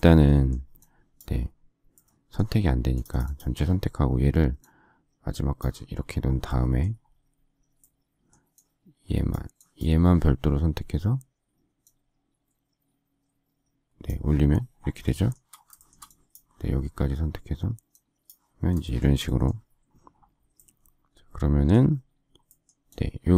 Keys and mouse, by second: 2.4 click, 3.4 click, 6.5 middle click, 8.6 click.